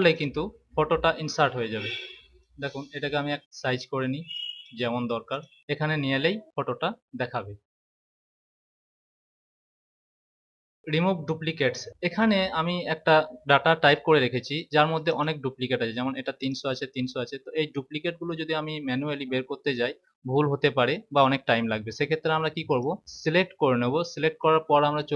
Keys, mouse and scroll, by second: 0.1 click, 2.3 click, 5.2 click, 15.0 click, 16.3 click, 22.7 click.